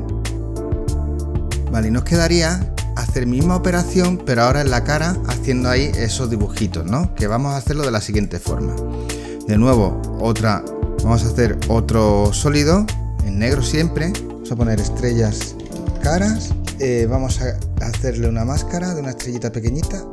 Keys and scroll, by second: 1.5 space, 14.4-16.9 typing.